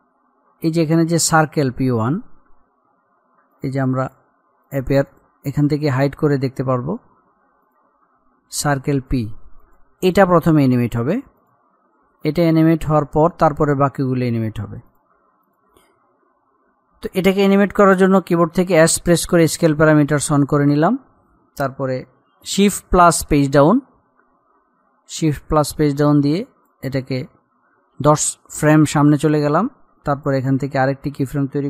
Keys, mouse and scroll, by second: 1.5 click, 6.3-7.2 scroll up 1, 7.8 click, 15.1 click, 18.9 s, 20.1 click, 23.5 shift+Page_Down, 25.2-25.8 alt+scroll up 1, 26.5-29.0 drag, 30.4 click.